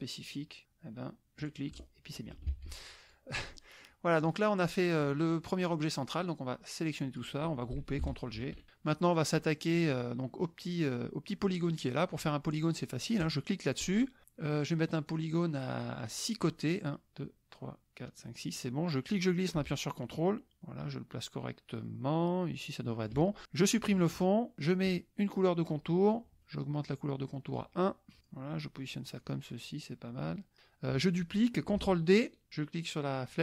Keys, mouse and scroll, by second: 1.4 click, 1.7 drag, 2.5 ctrl+z, 3.0 ctrl+click, 3.5 ctrl+click, 4.2-5.3 drag, 6.3-7.7 drag, 8.5 ctrl+g, 8.7 click, 9.7 click, 13.2 click, 15.1 click, 15.7 click, 19.1-23.3 drag, 24.1 click, 26.0 click, 26.4 right click, 27.5 click, 28.2 click, 28.4 middle click, 29.2-30.6 drag, 33.2-33.4 drag.